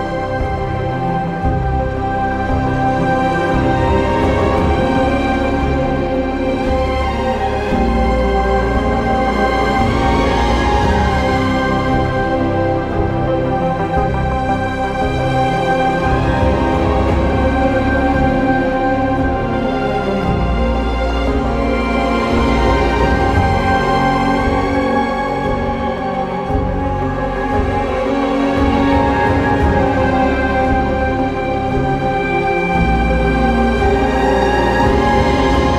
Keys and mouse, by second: 2.0 ctrl+z, 8.8 ctrl+b, 12.9 shift+click, 16.3 1, 18.1 click, 18.8 g, 19.0 g, 19.6 click, 19.9 alt+z, 20.1 drag, 20.5 q, 21.8 alt+z, 23.3 g, 24.0 click, 24.0 g, 24.2 alt+z, 24.8 q, 25.4 alt+z, 26.5 g, 26.6 g, 27.3 click, 27.5 alt+z, 27.7 click, 28.1 q, 29.2 alt+z, 30.1 g, 30.3 g, 31.2 alt+z, 31.8 q, 32.4 alt+z, 33.5 shift+click, 34.5 j, 35.2 Tab.